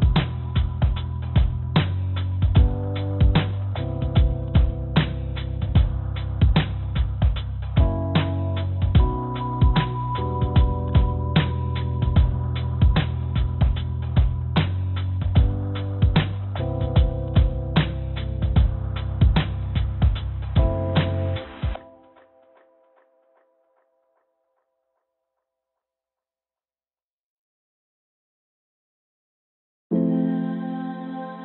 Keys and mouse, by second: 3.5-5.4 drag, 3.6-5.4 right drag, 6.3 click, 7.0-8.6 drag, 10.2 click, 10.9 s, 15.2-18.6 drag, 15.4-18.6 middle drag, 15.4-18.6 right drag, 18.9 click, 18.9 middle click, 18.9 right click, 22.8 ctrl+z, 24.3 s, 28.2 g, 31.1-31.4 drag, 31.1-31.4 right drag.